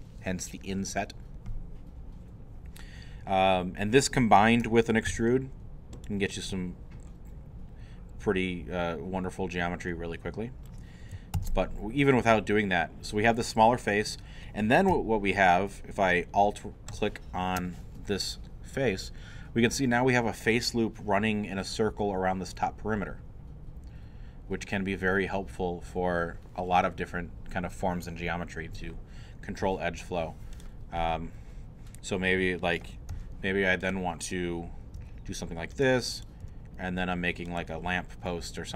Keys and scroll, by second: 5.1 e, 11.4 ctrl+z, 33.1 e, 35.0 e, 36.4 e.